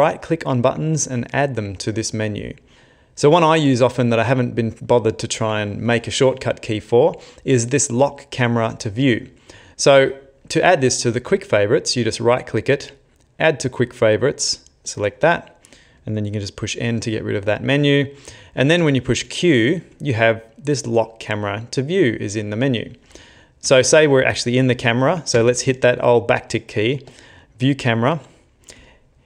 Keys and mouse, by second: 2.7 click, 3.3 n, 3.7 n, 11.8 right click, 16.9 n, 18.8 q, 22.4 click, 23.1 Tab, 23.7 Tab, 25.4 `.